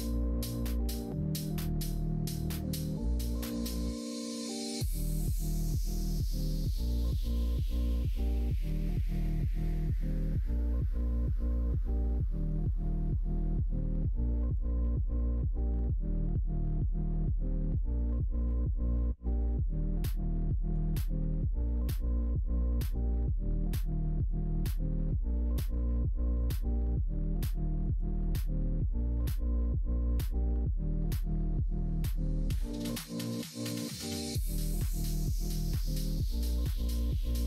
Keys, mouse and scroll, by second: 2.6 right click, 4.0 ctrl+right click, 6.3-9.8 middle drag, 10.1 ctrl+z, 12.5 s, 17.8 2, 18.4 alt+click, 19.0 middle click, 20.7 s, 22.2 ctrl+z, 22.4 middle click, 22.8 s, 24.0 middle click, 24.7 middle click, 25.4 middle click, 25.8 right click, 26.3 click, 27.0 2, 27.5 3, 27.7 click, 28.1 shift+click, 30.5 middle click, 31.1 KP_1, 31.3 KP_3, 33.5 ctrl+right click, 34.9 ctrl+right click, 36.9 middle click.